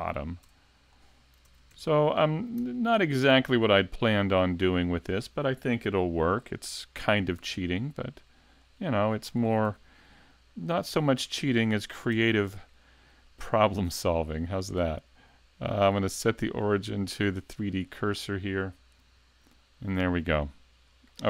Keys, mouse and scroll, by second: 0.4 Tab, 0.9-1.4 scroll up 1, 1.5 ctrl+Tab, 3.3 alt+right click, 3.7 middle click, 7.4 shift+s, 9.2-9.7 scroll down 2, 9.7 a, 10.2 middle click, 12.1 Tab, 12.5 right click, 13.3 middle click, 14.0-15.3 scroll down 2, 14.4 shift+middle click, 16.4 click, 21.1 middle click.